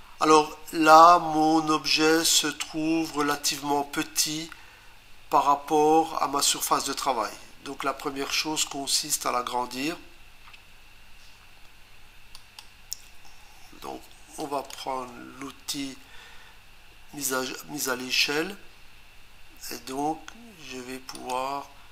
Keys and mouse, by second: 2.4 click, 12.3 click, 14.4 click, 14.6 Return, 21.1 click.